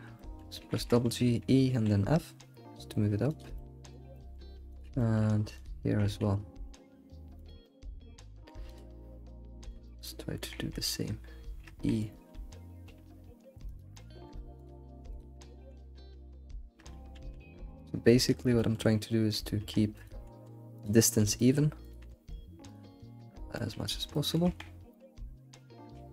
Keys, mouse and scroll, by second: 0.1 shift+middle click, 1.0 g, 3.5-4.8 middle drag, 4.8 click, 5.0 shift+middle click, 5.6 ctrl+click, 5.9 g, 7.6-8.7 middle drag, 8.7 click, 9.7 ctrl+click, 9.8 middle click, 10.4 g, 13.9-14.6 middle drag, 14.6 click, 15.2 ctrl+click, 15.4 g, 18.0-19.7 middle drag, 19.7 Tab, 20.2 g, 21.3 shift+middle click, 21.9 click, 22.0 g, 23.0-23.4 scroll down 2, 23.4 g, 23.5 middle click, 24.9-26.0 middle drag, 24.9 scroll down 1.